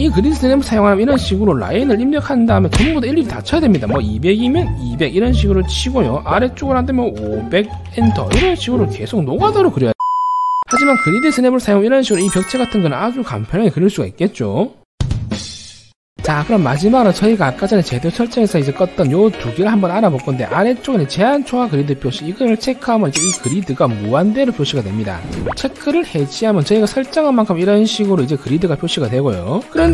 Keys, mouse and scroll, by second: 1.5 1, 1.7 right click, 2.0 click, 3.9 2, 5.9 right click, 7.4 5, 8.3 right click, 12.5 middle click, 22.8 right click, 23.7 right click, 25.9 click, 27.7 click.